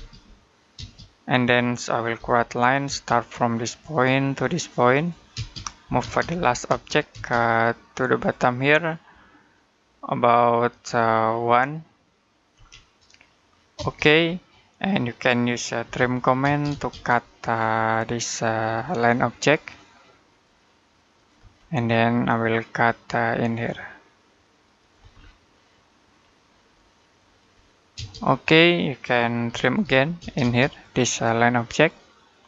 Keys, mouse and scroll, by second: 1.5 middle click, 2.0 l, 2.7 space, 3.7 click, 5.1-6.5 typing, 8.0 click, 12.4 1, 13.6 space, 15.7-16.2 typing, 17.4-18.4 scroll up 1, 18.4 click, 21.5 middle click, 23.3 click, 25.0 scroll down 1, 25.3 middle click, 26.0-26.6 scroll up 1, 26.6 click, 27.8 space, 29.3-30.0 typing, 30.5 click.